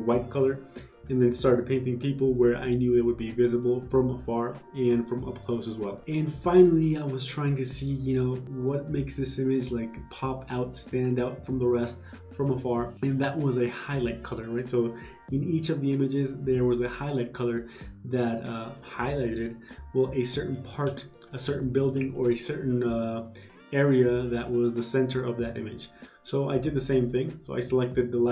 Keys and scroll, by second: 1.0 ctrl+z, 27.5 [.